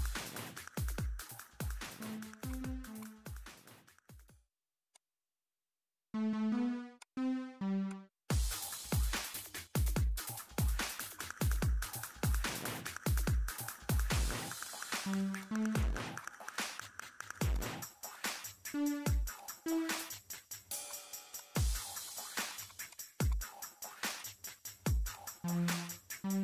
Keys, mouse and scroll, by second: 2.5 click, 3.8 ctrl+Num_Lock, 3.8 click, 4.1 ctrl+8, 4.6 scroll up 2, 4.9 click, 7.0 click, 7.9 click, 8.5-9.2 typing, 9.1 scroll up 2, 9.2 scroll down 2, 10.0 click, 10.8 click, 13.3 scroll down 2, 13.7 scroll up 2, 14.6 click, 14.9 middle click, 15.4 click, 18.1 click, 19.0 click, 20.1 click, 20.7-21.3 scroll up 4, 20.9 click, 21.3-23.4 drag, 24.0 click, 24.7 8, 25.1 click.